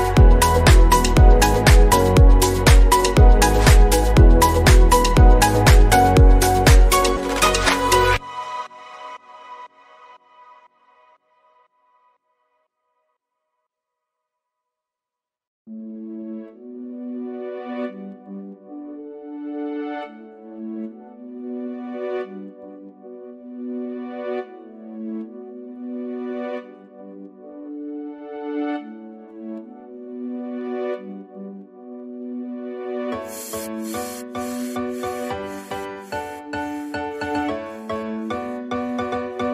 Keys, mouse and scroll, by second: 3.5-7.5 middle drag, 7.5 click, 7.9-8.9 scroll down 2, 8.2 middle click, 8.9-11.3 shift+middle drag, 11.3-11.8 scroll up 1, 11.8 click, 21.7 click, 22.2-23.0 scroll down 4, 23.0 click, 23.4 KP_Decimal, 24.0-24.6 scroll down 14, 24.6-28.7 middle drag, 28.7 KP_7, 29.1-29.5 scroll up 1, 29.5 middle click, 30.2-30.9 scroll down 5, 30.4 shift+middle click, 30.9-34.8 middle drag, 31.8-32.4 scroll down 1, 34.8 click, 35.4-36.1 scroll up 1, 36.1-37.6 drag, 36.7 scroll down 2, 36.9 middle click, 38.1 KP_0, 38.8-39.5 scroll up 1.